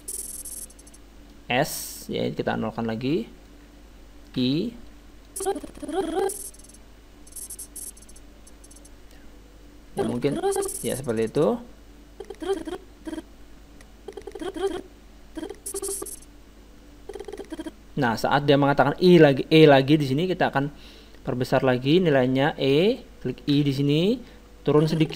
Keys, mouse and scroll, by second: 2.5-4.3 drag, 4.4 i, 5.3-7.0 drag, 20.6-22.4 drag, 23.5 i, 24.7-25.1 drag.